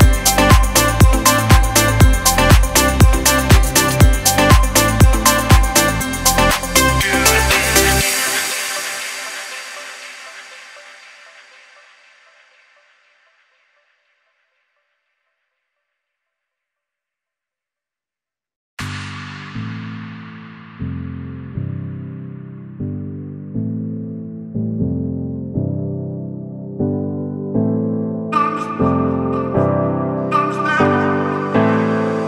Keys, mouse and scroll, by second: 2.9 alt+scroll down 1, 3.4 click, 3.7 space, 3.8 click, 4.2 space, 4.8 click, 5.1 click, 7.1-16.4 drag, 16.7 click, 16.7-19.8 drag, 23.2 alt+scroll down 1, 24.5-24.9 scroll up 2, 25.5 click, 25.8 alt+scroll up 1, 27.4-30.9 drag, 31.7 alt+scroll down 1.